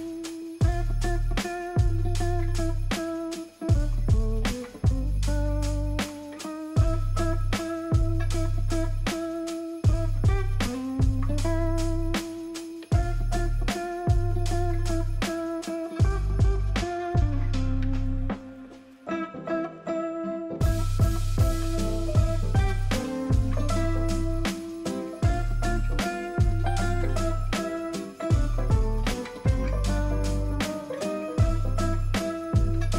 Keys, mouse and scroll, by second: 2.4 alt+click, 6.9 ctrl+a, 7.4 ctrl+d, 10.1 alt+click, 10.9 alt+click, 16.7 alt+click, 25.6 ctrl+a, 26.9 ctrl+d, 30.1 ctrl+click.